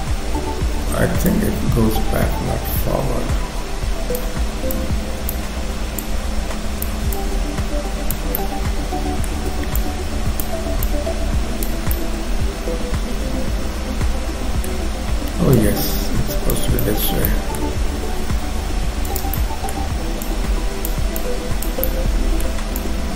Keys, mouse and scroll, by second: 1.1-1.5 scroll up 1, 1.5 click, 4.8 click, 6.2 click, 8.4 middle click, 9.9 click, 11.0 click, 11.9 middle click, 15.7 click, 16.8 middle click, 17.3 middle click, 18.3 f, 19.4 middle click, 20.3 click, 21.2 click, 21.8 middle click, 22.8 click.